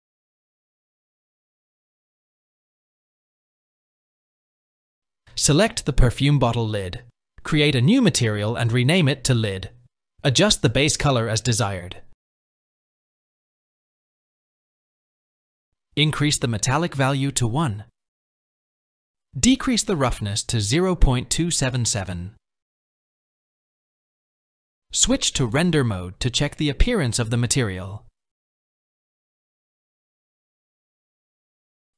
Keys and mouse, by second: 5.1-5.8 shift+drag, 7.4 click, 8.3-10.1 drag, 12.1 click, 16.7 click, 16.7 middle click, 18.0-19.6 drag, 21.3-23.8 drag, 27.3 click, 29.4-31.9 drag.